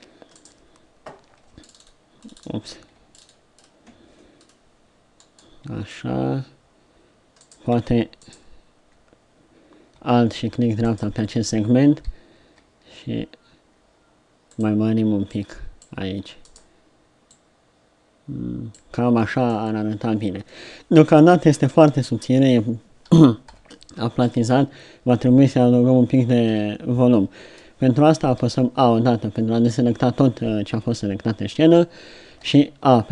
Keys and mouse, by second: 7.4-12.8 right drag, 12.4 s, 15.3-17.3 drag, 17.3-18.3 middle drag, 20.5 middle click, 23.5 KP_3, 26.5 KP_7, 28.5 a, 32.3 a.